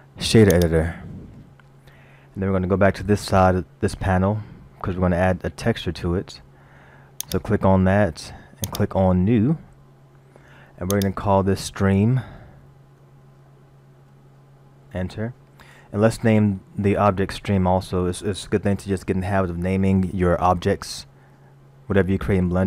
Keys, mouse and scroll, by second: 4.5-5.0 scroll down 4, 7.3 click, 8.7 click, 10.9 click.